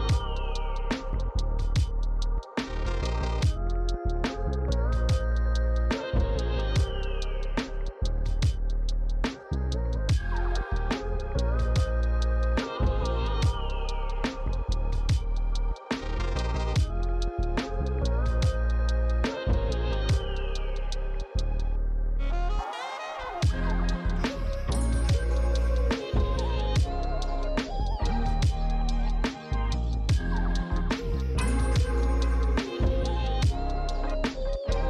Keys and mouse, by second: 10.3 click, 16.3 click, 18.8 Tab, 19.1 click, 19.3 Tab, 19.3 click, 25.3 click, 25.6 Tab, 26.4 click, 28.4 click, 32.7 click.